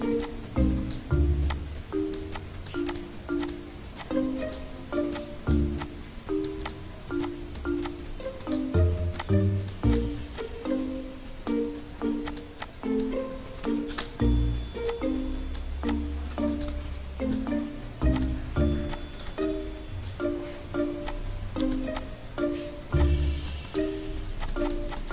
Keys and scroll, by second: 13.9 ctrl+g.